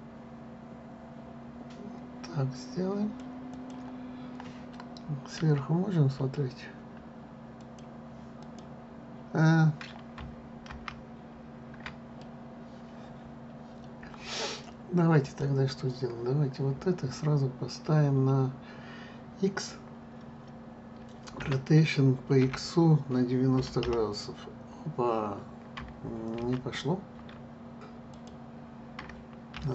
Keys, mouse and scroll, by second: 4.2-7.2 drag, 11.3 ctrl+z, 12.9-15.9 middle drag, 15.9 click, 22.1 r.